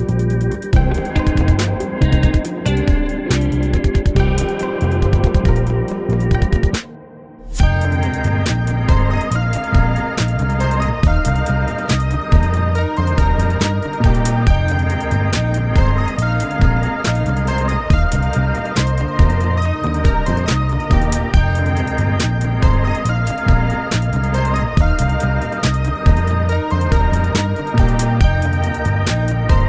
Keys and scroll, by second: 2.3 alt+z, 4.2 alt+z, 6.2 ctrl+z, 15.0 ctrl+r, 15.8 Escape, 17.6 Escape, 20.0 ctrl+1, 22.5 ctrl+e, 23.5 ctrl+r, 23.7 Escape, 27.4 ctrl+r, 27.6 Escape, 28.1 ctrl+e.